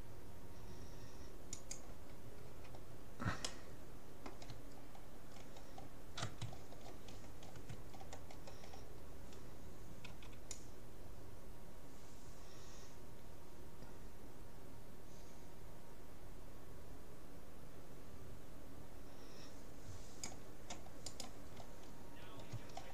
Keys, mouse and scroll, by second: 2.6 a, 3.4-5.4 middle drag, 5.2-6.8 scroll up 1, 6.6-7.6 middle drag, 7.6-7.9 scroll up 1, 7.9-11.0 middle drag, 10.2 c, 21.5-22.9 middle drag.